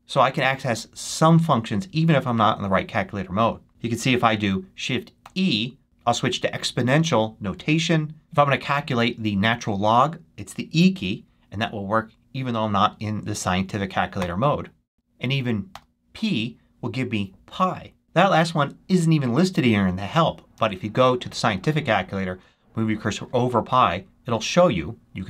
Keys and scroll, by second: 5.1 shift+e, 14.1 e, 15.6 p, 20.4 super+2.